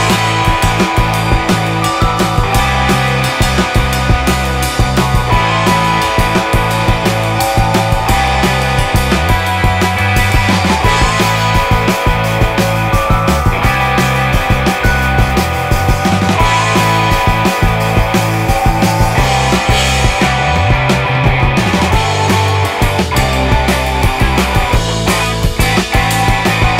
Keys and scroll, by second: 0.5 ctrl+z, 3.0 ctrl+z, 4.7 ctrl+z, 7.5 ctrl+z, 8.1 space, 12.0 space, 12.6 ctrl+z, 14.1 space, 14.5 ctrl+z, 15.7 space, 19.0 ctrl+z, 21.9 ctrl+z.